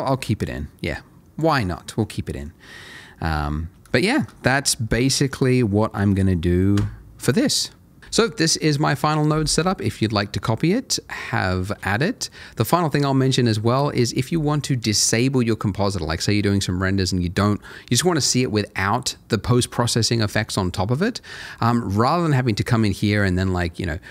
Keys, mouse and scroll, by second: 1.7 middle click, 3.7 scroll down 1, 3.9 shift+middle click, 4.7 middle click, 5.6 middle click, 22.9 click.